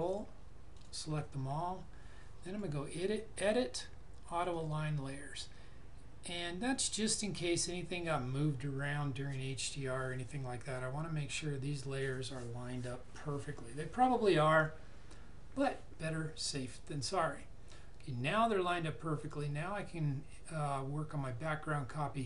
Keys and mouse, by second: 0.0 ctrl+click, 2.4 click, 19.1 click.